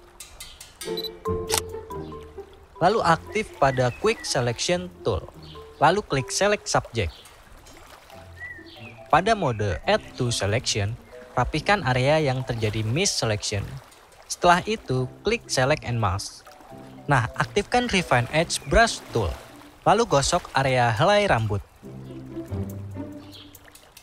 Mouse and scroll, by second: 10.8-12.0 drag.